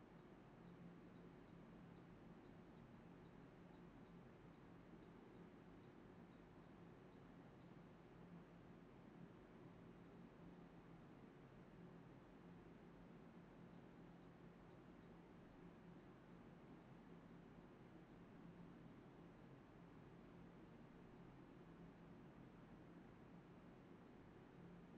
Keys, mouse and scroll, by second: 1.6 alt+click, 2.1 alt+click, 11.7 alt+click, 11.8 alt+click, 12.1 d, 13.2 alt+click, 13.5 alt+click, 13.9 alt+click, 14.1 alt+click, 14.3 alt+click, 15.5 ctrl+b, 15.7 double click, 15.9-16.2 typing, 17.1 double click, 18.2 shift+click, 18.2 shift+double click, 18.4 shift+click, 19.0 double click, 19.1 shift+click, 19.2 shift+double click, 19.3 shift+click, 20.0 alt+click, 20.2 alt+click, 20.3 alt+click, 20.8 alt+click, 21.0 alt+click, 21.1 alt+double click, 21.5 alt+click, 21.6 alt+click, 21.7 alt+click, 23.4-24.1 typing, 24.3 shift+click, 24.4 shift+double click.